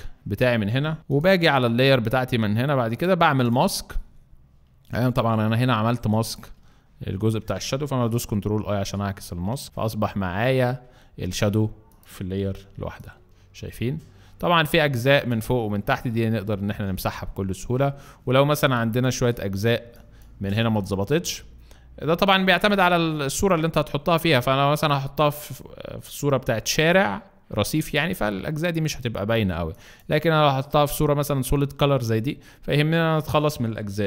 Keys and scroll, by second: 5.9 alt+space, 8.7 ctrl+i, 12.3 v, 16.6 ctrl+alt+z, 18.5 ctrl+alt+space, 19.7 ctrl+alt+space, 22.4 b, 29.4 alt+space.